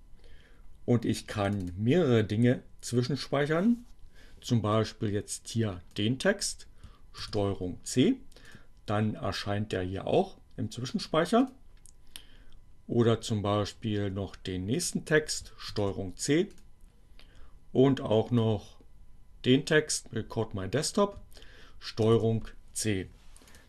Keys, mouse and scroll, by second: 0.9-1.9 drag, 4.6-5.9 drag, 7.0 ctrl+c, 8.3 click, 11.4 click, 12.9-14.7 drag, 14.9 ctrl+c, 15.1-16.7 drag, 18.0-19.8 drag, 20.0 ctrl+c, 23.5 click.